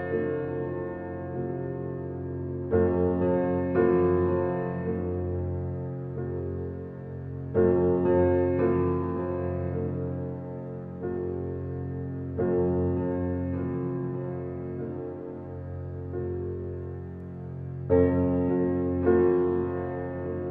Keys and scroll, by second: 0.6 space, 3.7 g, 8.0 g, 11.6 g, 17.8 g.